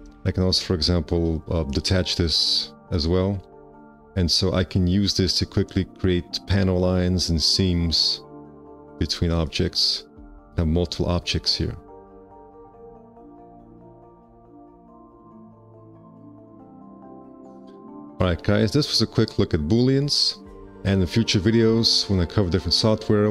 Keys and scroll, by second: 0.2 5, 2.0 d, 3.4 5, 10.3 F4, 13.3 w, 17.9 F4, 18.5 q.